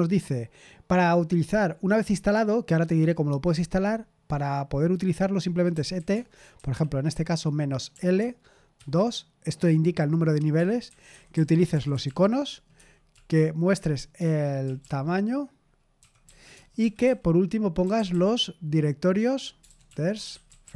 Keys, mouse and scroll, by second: 5.4-6.5 typing, 7.9-8.7 typing, 10.5-13.1 typing, 14.1-20.7 typing.